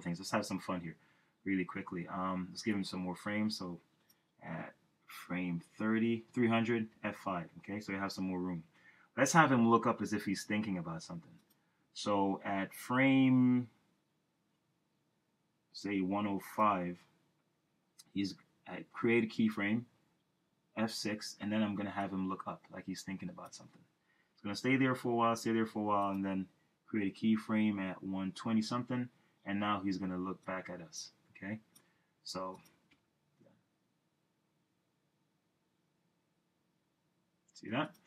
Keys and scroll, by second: 7.0 F5, 20.8 F6, 27.7 F6, 33.0 Return.